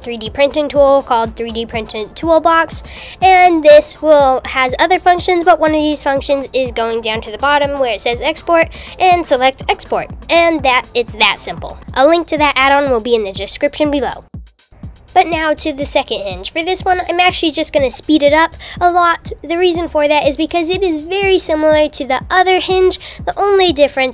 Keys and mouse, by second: 3.1 click, 5.6 click, 7.0 n, 13.5 g, 18.4-24.1 typing, 19.2 super+a, 19.3 Tab, 19.5 click, 20.0 super+z, 20.6 shift+click, 22.4 Tab, 22.5 Tab, 23.0 Tab, 23.2 Tab, 23.2 Tab.